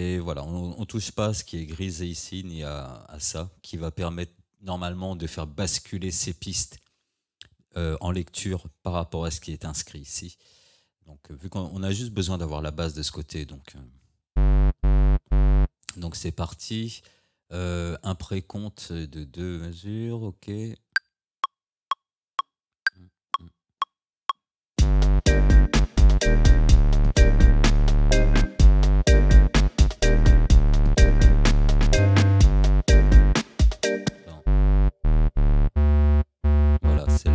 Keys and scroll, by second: 34.1 space.